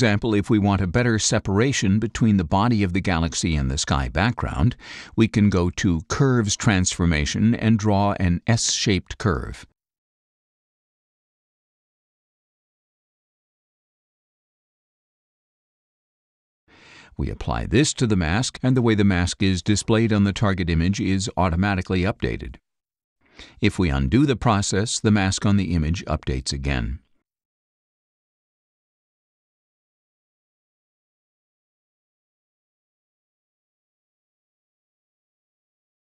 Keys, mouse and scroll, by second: 7.6-8.0 scroll up 4, 8.5 click, 10.2 click, 11.7 click, 13.2-14.5 drag, 15.4-16.4 drag, 17.3-20.8 drag, 24.0 click, 26.6 click, 29.6 click, 30.7 click, 31.8 click, 32.7 click.